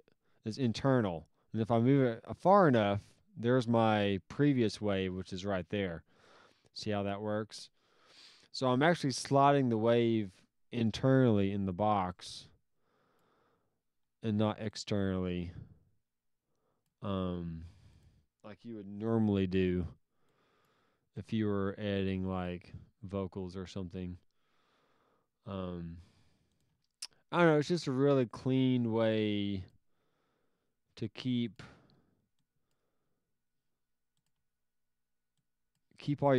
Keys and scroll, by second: 19.2 s, 26.7 alt+s, 31.7 alt+s, 34.3 alt+s.